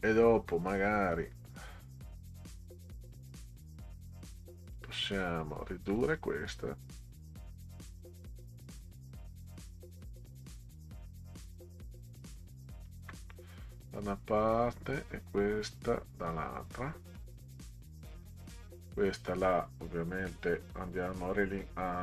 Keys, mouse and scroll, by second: 4.6 click, 6.2-12.8 shift+drag, 14.7-16.3 drag, 18.1 click, 18.9 click, 21.2 click.